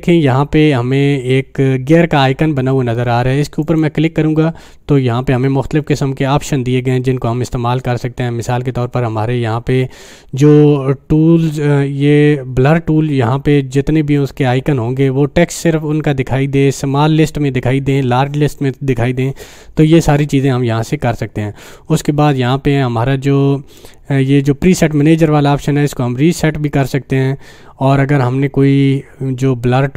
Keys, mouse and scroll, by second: 3.6 click.